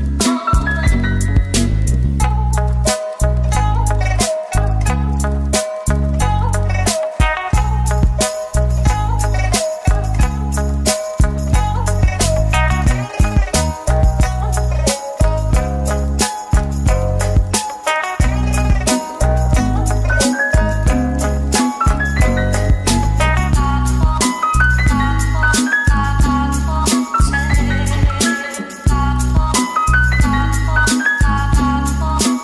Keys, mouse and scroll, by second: 2.6 double click, 8.3 double click, 8.9 Tab, 10.1 a, 10.9 ctrl+b, 12.6-14.2 scroll up 1, 16.9 Tab, 17.2 middle click, 17.7 right click, 18.7 middle click, 21.0 shift+a, 25.1 middle click, 26.1 Tab, 28.3-29.2 typing, 32.3 middle click.